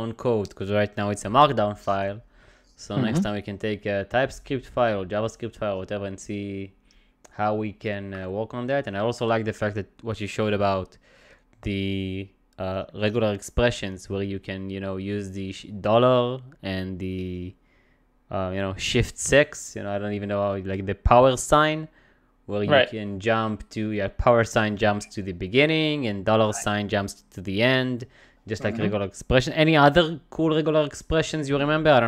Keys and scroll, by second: 25.8 ^, 28.4 $.